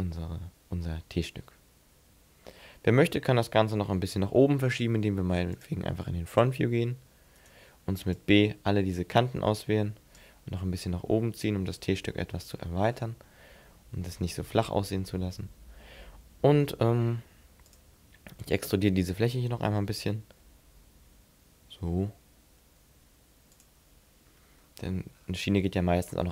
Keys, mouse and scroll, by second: 1.3 middle click, 2.3-2.7 scroll up 1, 2.7 scroll down 1, 5.5 click, 7.4 right click, 7.7 b, 10.2 click, 12.1 scroll up 4, 12.5-13.4 scroll down 6, 13.4 middle click, 17.7 click, 19.1 right click, 20.0 e, 23.7 click, 24.3-24.7 scroll down 2, 24.7 scroll up 1, 24.8-25.5 scroll down 5, 25.9 middle click.